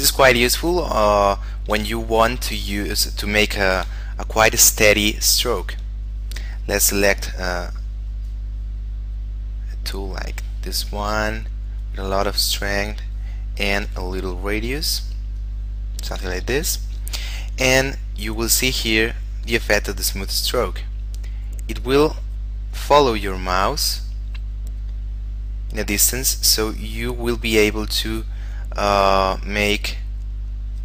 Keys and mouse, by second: 1.5 shift+middle click, 2.3 ctrl+middle click, 3.1 middle click, 3.5 shift+middle click, 4.1 middle click, 5.5 f, 7.3 click, 14.1 f, 15.0 click, 16.5 ctrl+z, 18.3 click.